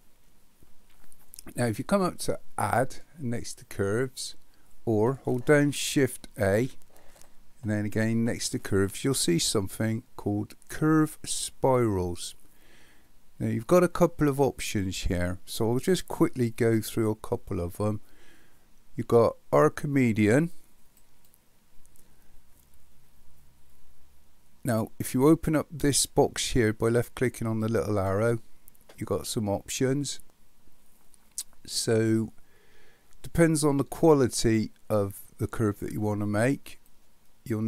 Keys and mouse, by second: 2.8-4.7 drag, 6.5 shift+a, 27.6 click, 36.9-37.6 drag.